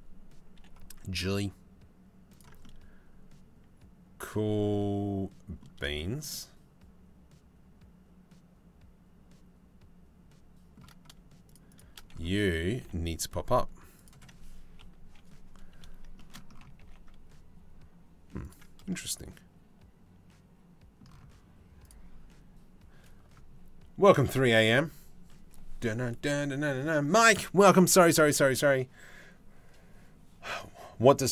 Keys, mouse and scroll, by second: 0.2 g, 2.2-5.2 middle drag, 5.6 shift+middle click, 5.9-7.3 middle drag, 7.3-10.8 drag, 11.1 shift+click, 12.3 g, 14.4 KP_3, 16.4 g, 18.5-20.7 drag.